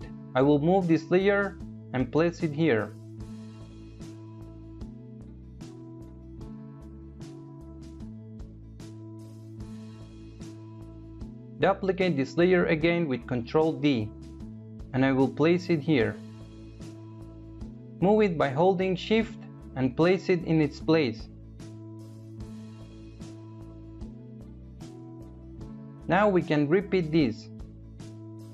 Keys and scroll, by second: 11.7 ctrl+d.